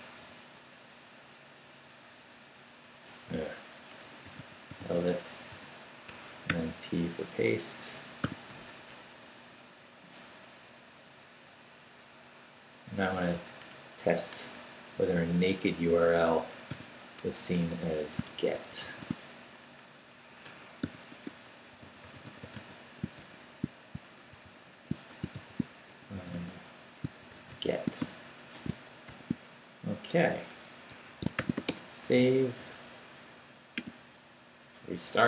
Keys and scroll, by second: 0.2 u, 3.3-6.5 typing, 6.1 Escape, 8.2 i, 8.5 BackSpace, 10.7 Down, 11.1 Up, 12.4 Right, 14.9 Right, 16.7 i, 17.0 BackSpace, 18.1-19.3 typing, 20.4 Escape, 20.8-23.1 typing, 21.1 Tab, 24.4-29.1 typing, 30.9 Escape, 31.4 shift+;, 31.7 Return.